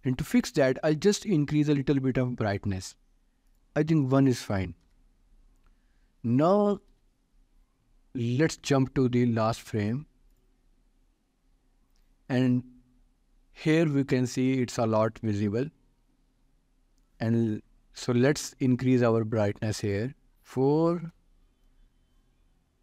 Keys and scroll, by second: 4.8 Return, 7.3 ctrl+s, 20.3 4, 20.7 Return.